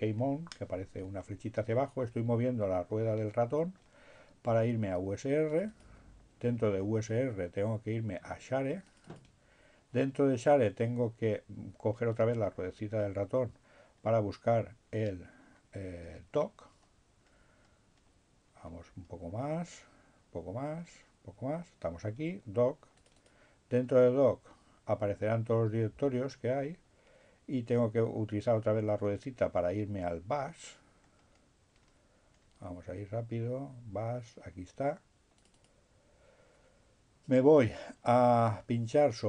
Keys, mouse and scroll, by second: 0.2-0.5 scroll down 2, 1.5-2.9 scroll down 2, 2.9-3.2 scroll down 1, 4.8-6.5 drag, 8.5-9.8 drag, 12.4-13.2 scroll down 2, 14.9-15.4 scroll down 2, 15.4-16.5 scroll down 1, 16.5-17.5 scroll down 1, 17.5-18.6 scroll down 1, 18.6-19.9 scroll down 1, 19.9-20.2 scroll down 1, 20.9-21.3 scroll down 1, 23.1 click, 25.7-27.1 scroll down 1, 27.3 scroll down 1, 27.9-28.3 scroll down 1, 28.5-29.3 scroll down 2, 29.3-31.0 scroll down 1, 31.0-32.5 scroll down 1, 32.5-33.5 scroll down 1, 33.5 scroll down 1, 35.2-36.3 drag.